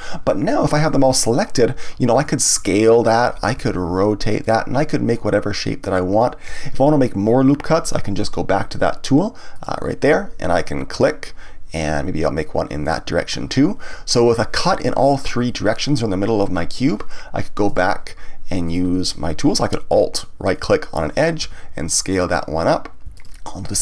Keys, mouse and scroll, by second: 2.1 s, 3.1 click, 3.5 r, 4.5 click, 5.1-8.1 middle drag, 9.5 click, 10.9 click, 12.8 click, 17.6 click, 18.6 click, 20.5 alt+click, 21.4 s, 22.2 click, 23.1 alt+click.